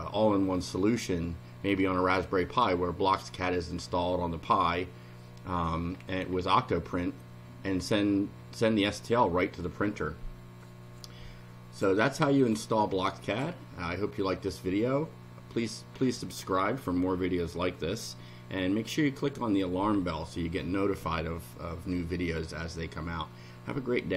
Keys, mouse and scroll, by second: 5.6-6.6 scroll up 7, 12.4 click, 13.3 click.